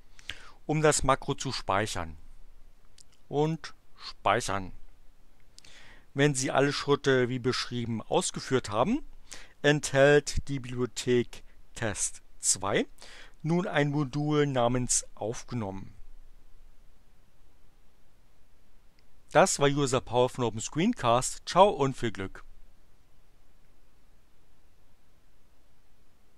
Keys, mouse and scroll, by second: 3.5 click, 21.0 click.